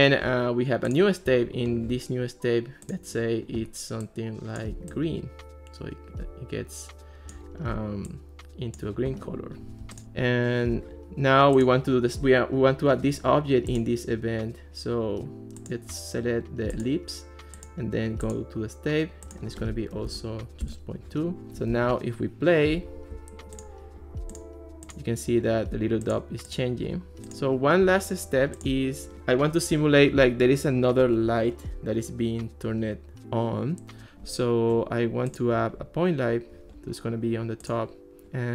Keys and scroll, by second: 20.1 2, 20.6 Return, 21.7 alt+r.